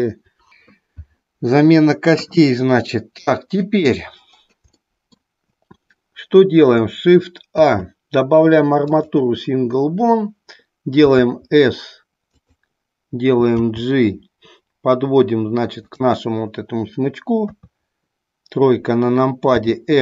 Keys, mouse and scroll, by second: 4.8-5.4 middle drag, 11.0 s, 12.5 click, 13.5 g, 16.0 click, 19.6 r.